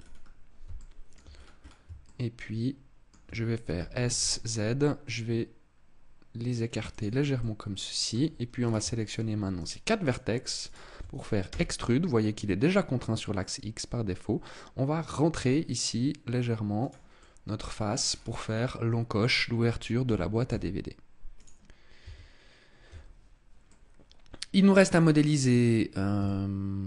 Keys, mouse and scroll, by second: 0.6 shift+middle click, 1.2-1.7 scroll up 7, 1.9 shift+middle click, 3.6 s, 6.9 click, 7.3 middle click, 8.5 right click, 8.9 shift+right click, 9.5 right click, 9.9 shift+right click, 10.5 shift+right click, 11.3 e, 17.1 click, 17.1 middle click, 17.9 scroll down 5, 19.9 g, 21.3 click, 21.9 Tab, 22.7 Tab, 23.5 middle click, 26.1 shift+middle click.